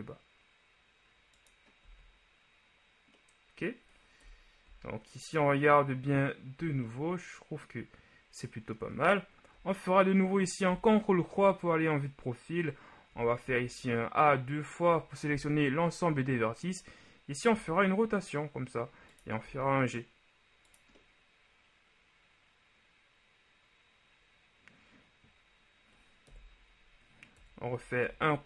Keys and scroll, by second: 2.0 z, 4.2 KP_1, 4.7 z, 10.8 ctrl+KP_3, 13.2 a, 13.5 a, 17.8 r, 19.5 g, 26.4 KP_1, 27.4 KP_3, 28.1 KP_3.